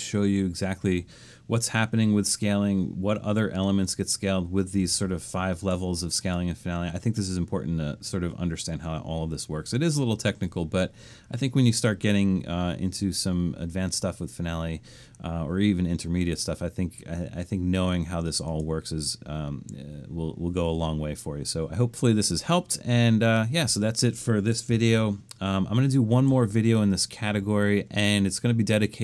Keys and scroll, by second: 24.9 super+-, 26.1 super+-.